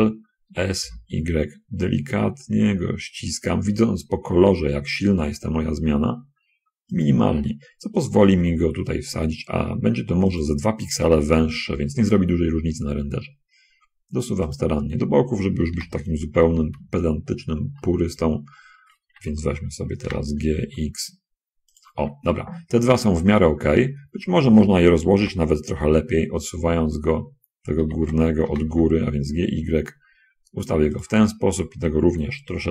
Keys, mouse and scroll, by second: 0.8 s, 1.2 y, 8.4 g, 8.6 y, 10.4 click, 11.6 g, 11.8 x, 14.8 shift+click, 16.0 l, 16.7 x, 18.4 shift+x, 19.3 Escape, 20.4 g, 20.8 x, 22.0 shift+click, 23.2 middle click, 25.4 l, 26.1 y, 28.1 Escape, 28.4 g, 29.0 y, 31.3 click.